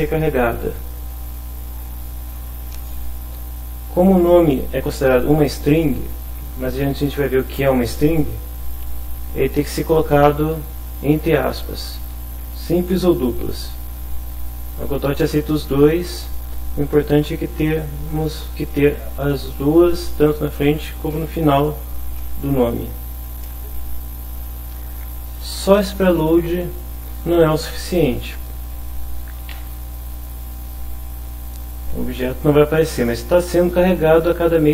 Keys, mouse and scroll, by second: 4.0 Right, 10.7 Left, 11.2 Right, 11.7 Left, 12.1 Right, 12.6 Left, 14.0 Right, 22.5 Left, 23.5 Home, 26.9 End, 29.5 F5.